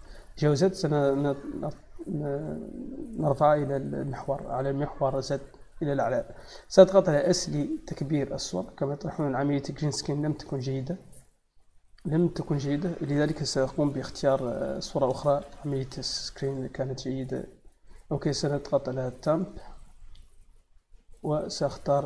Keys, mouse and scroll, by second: 2.2 click, 10.6 click, 14.1 x, 14.5 click, 17.4 click, 20.5 click, 20.7 click.